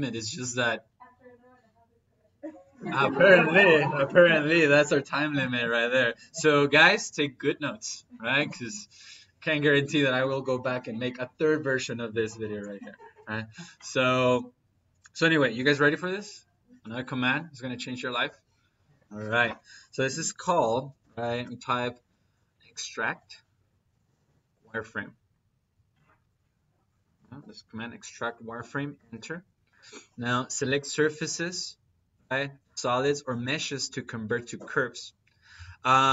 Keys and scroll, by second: 20.0 Escape, 20.8-23.7 typing, 28.8 Return.